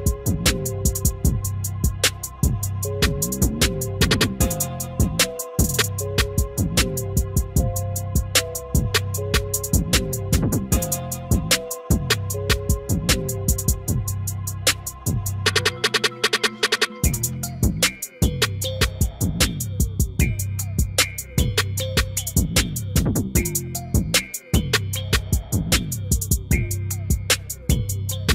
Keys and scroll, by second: 14.7 F3.